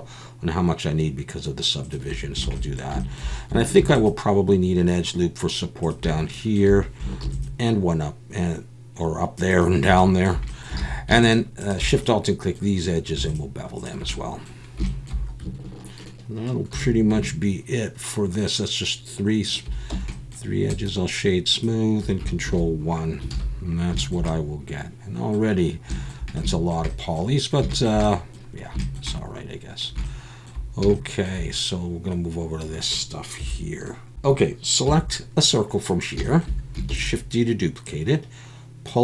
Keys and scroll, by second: 2.4 alt+a, 3.8 ctrl+r, 7.2 ctrl+r, 10.8 alt+a, 16.7 ctrl+b, 19.9 Tab, 22.5 ctrl+1, 23.3 alt+a, 33.4 KP_1, 34.8 KP_1, 36.9 shift+d.